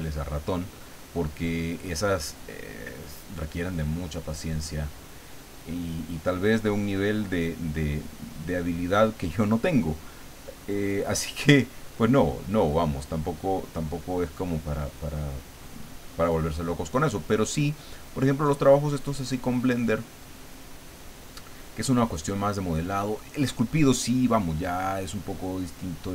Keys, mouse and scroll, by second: 0.6 click, 1.6 click, 2.3 click, 2.9 click, 3.6 click, 4.2 click, 4.7 click, 5.2 click, 6.0 click, 7.2 click, 8.1 click, 9.1 click, 10.0 click, 10.8 click, 11.7 click, 12.8 click, 14.0 click, 15.7 click, 16.6 click, 18.0 click, 19.2 click, 20.4 click, 21.5 click, 25.6-26.1 drag.